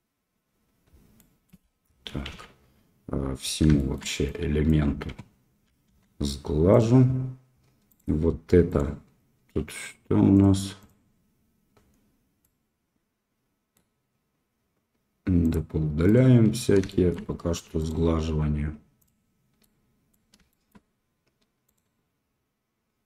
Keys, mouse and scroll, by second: 1.1 middle click, 2.3 ctrl+a, 3.7 shift+middle drag, 4.4 drag, 5.8 q, 7.9 click, 8.6 click, 12.4-13.7 middle drag, 16.0 click, 16.8 shift+middle click, 17.7-19.0 drag, 19.0 middle click, 19.6 middle click, 20.5 shift+middle click, 21.6 click.